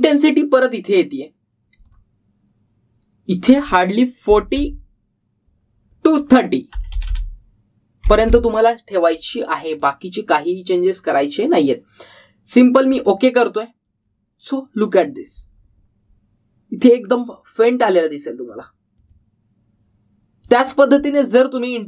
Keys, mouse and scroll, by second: 0.5-1.2 typing, 2.6-3.3 typing, 2.8 click, 10.5-11.2 typing, 10.7 click, 13.8 click, 17.4-17.9 scroll up 1, 17.9-19.4 scroll down 1, 19.4-21.8 drag.